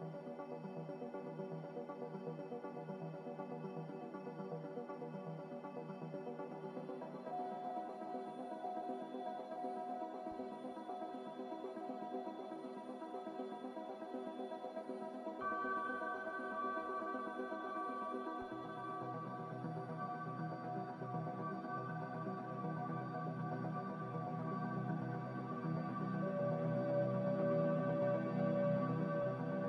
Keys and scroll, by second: 2.1 Escape, 18.0 Delete, 20.1 z, 23.5 ctrl+z, 27.0-27.9 typing, 28.1 Return.